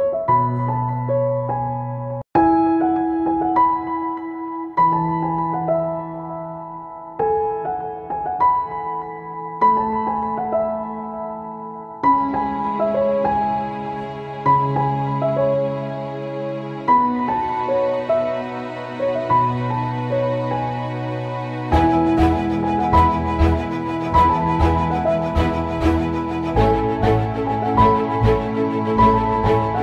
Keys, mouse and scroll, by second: 0.6-4.4 drag, 4.4 ctrl+c, 4.7 ctrl+v, 5.5-7.6 drag, 10.6 click, 12.4 click, 18.4 click, 19.0 ctrl+c, 19.3 ctrl+v, 20.0-23.0 drag, 27.9-29.8 drag.